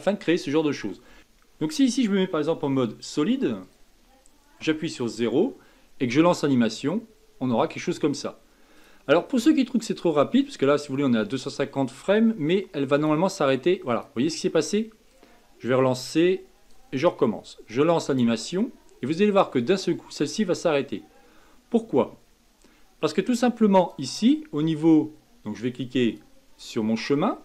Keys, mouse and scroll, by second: 0.0-1.2 middle drag, 2.7 z, 4.6 KP_0, 6.6-11.8 drag, 12.9-21.0 drag, 23.8-26.2 drag.